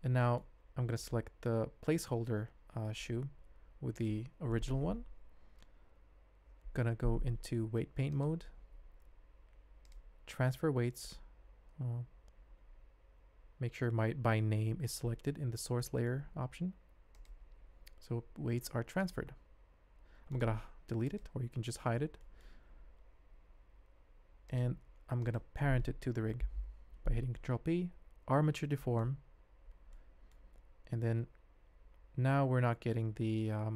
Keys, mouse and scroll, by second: 0.1 click, 1.3 g, 3.9 shift+click, 4.5 middle click, 6.6 ctrl+Tab, 9.8-12.1 drag, 15.8 middle click, 17.1 click, 18.2 ctrl+Tab, 19.5 g, 20.7 x, 22.2 click, 24.5 click, 26.4 ctrl+p, 29.9-30.3 middle drag, 30.6 ctrl+Tab, 31.3 r.